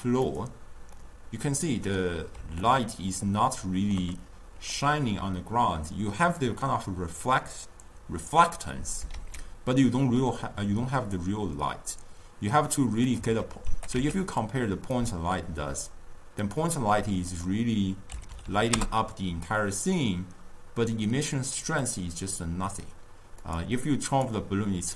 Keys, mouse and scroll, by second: 0.4 click, 1.3-9.5 middle drag, 9.8-13.4 ctrl+middle drag, 13.9 g, 18.9 0, 22.0 click, 24.3 click.